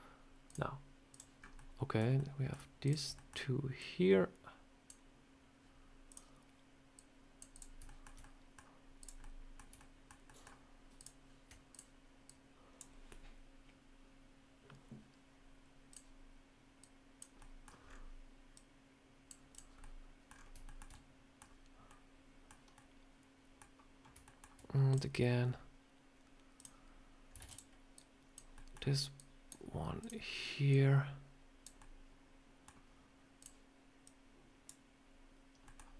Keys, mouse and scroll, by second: 0.3 click, 1.2 scroll up 3, 1.4 middle click, 2.0 middle click, 2.7 shift+click, 2.8 shift+click, 3.0 middle click, 3.6 click, 6.8 click, 7.4 click, 7.7 shift+middle click, 8.1 middle click, 8.8 click, 9.1 middle click, 9.6 shift+middle click, 10.1 shift+middle click, 10.8 shift+click, 11.6 click, 12.1 click, 12.2 shift+click, 15.7 click, 16.7 click, 17.2 middle click, 17.7 scroll up 3, 18.4 click, 19.4 click, 19.7 middle click, 20.2 scroll down 4, 20.5 shift+middle click, 20.8 middle click, 22.6 middle click, 22.6 shift+middle click, 24.1 shift+middle click, 24.3 shift+middle click, 24.8 click, 26.4 click, 26.8 scroll up 1, 27.3 shift+d, 27.8 click, 28.4 middle click, 29.0 click, 29.9 click, 30.6 click, 31.6 middle click, 33.2 click, 33.9 click, 35.5 middle click.